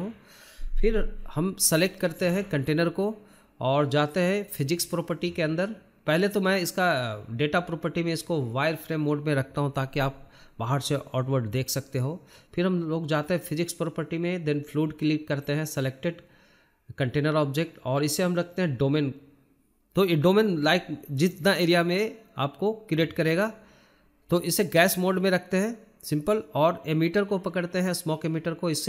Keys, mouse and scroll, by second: 1.2-2.6 shift+middle drag, 2.6 click, 3.4-3.9 drag, 4.4-4.9 shift+middle drag, 4.9 scroll up 2, 5.1-5.7 shift+middle drag, 5.7 click, 6.0 scroll down 2, 6.1-6.5 shift+middle drag, 6.5 click, 6.9 click, 7.2-9.0 shift+middle drag, 9.0 click, 9.4-9.9 scroll down 1, 9.9 drag, 10.2-10.9 scroll down 9, 10.9-12.7 drag, 12.7 shift+middle click, 13.1 shift+z, 13.6 middle click, 13.8 click, 14.1 click, 14.4 scroll down 1, 14.6 middle drag, 14.9 scroll up 1, 15.1-16.1 shift+middle drag, 16.1-17.2 scroll up 12, 17.6-19.5 drag, 20.7-22.5 shift+middle drag, 22.5-24.4 drag, 24.7-25.9 shift+middle drag, 25.9 scroll up 1, 26.0-27.4 shift+middle drag, 27.4-28.6 drag, 28.6 shift+middle click.